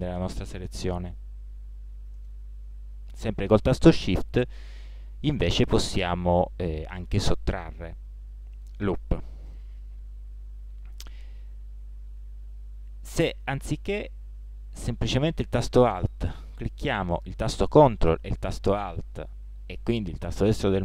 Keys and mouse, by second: 2.2-6.1 middle drag, 7.6-11.4 drag.